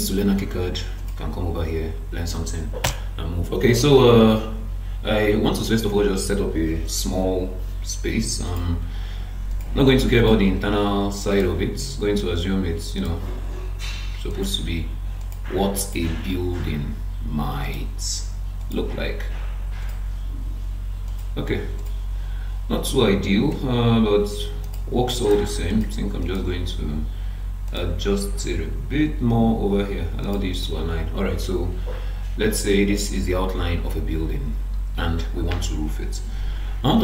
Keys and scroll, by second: 2.8 BackSpace.